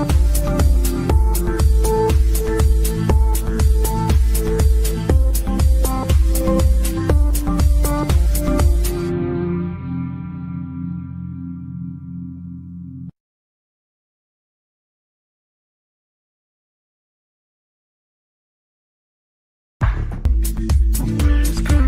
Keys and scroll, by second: 14.9 shift+Page_Down, 15.2 ctrl+Page_Up.